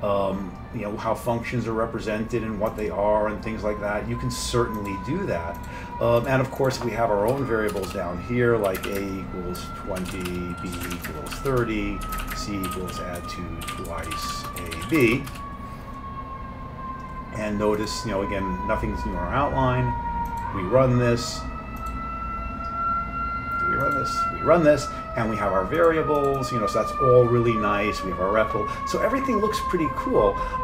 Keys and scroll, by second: 7.3 Return, 7.9 Return, 8.6-15.0 typing, 15.3 Return.